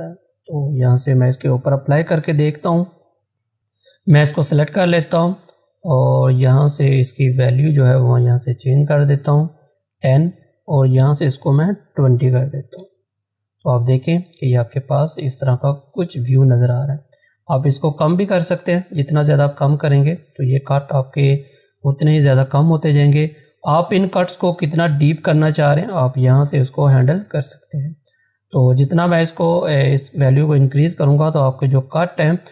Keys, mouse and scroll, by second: 2.3 z, 2.9 click, 5.8 click, 11.6-12.3 typing, 12.8 Return, 17.6 click, 20.0 click, 23.8 click, 25.4 click, 26.6 click.